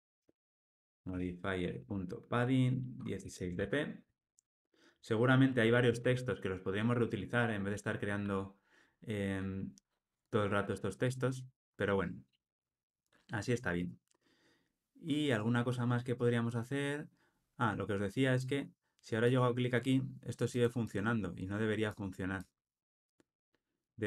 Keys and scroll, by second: 6.0 alt+super+l.